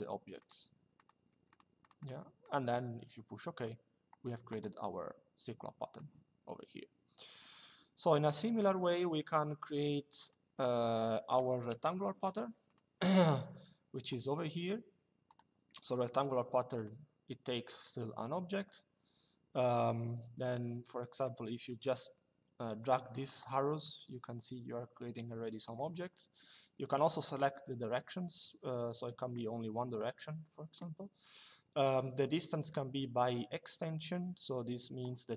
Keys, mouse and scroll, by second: 3.3 click, 5.6 click, 9.1 click, 11.4 Delete, 12.4 click, 15.0 click, 16.5 click, 20.9 click, 23.6 click.